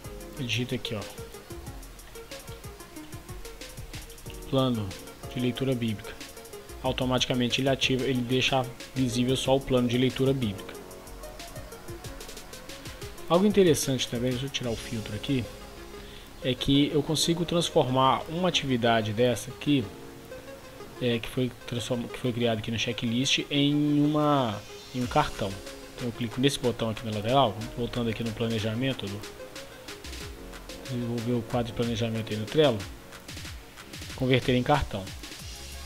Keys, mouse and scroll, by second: 0.4 click, 1.3-4.8 typing, 5.9-35.8 drag.